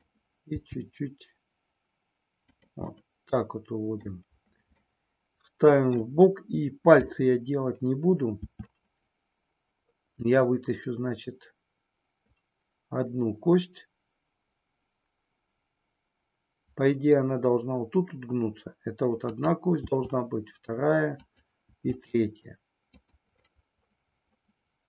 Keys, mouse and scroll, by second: 0.6 g, 2.4 click, 3.0-4.2 middle drag, 5.1 middle click, 8.4 e, 19.2 click, 19.8 e, 21.2 click, 21.7 e, 23.1 click, 23.4-24.8 middle drag.